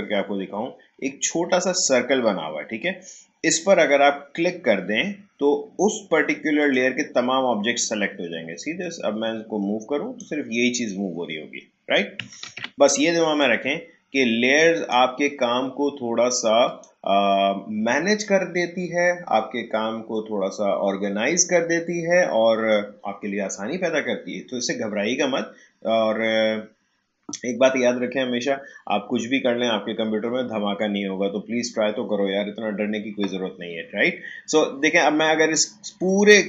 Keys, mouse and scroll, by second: 0.1 shift+scroll up 1, 2.5 shift+scroll down 1, 6.6-12.4 drag, 12.4 ctrl+z, 13.4-16.7 drag.